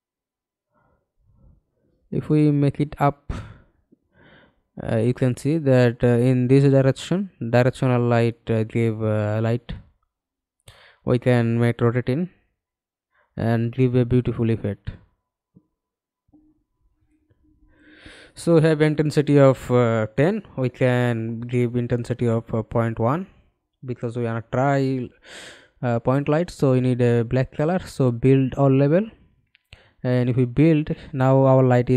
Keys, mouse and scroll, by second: 2.4 f, 2.9 alt+click, 4.1 middle click, 7.3 middle click, 8.2 e, 15.1-16.5 scroll down 4, 19.9 ., 20.2 1, 20.7 Return, 22.1 middle click.